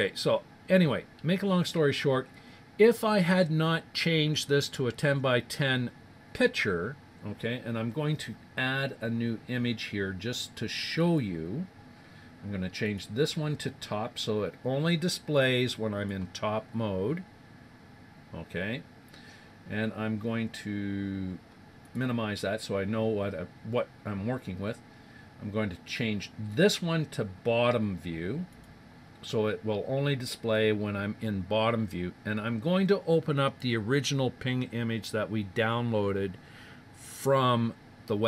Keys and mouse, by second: 0.2-3.6 middle drag, 11.0-12.7 drag, 12.8-14.5 drag, 19.8-21.8 middle drag, 21.8-23.6 drag, 26.4-28.2 drag, 38.2 click.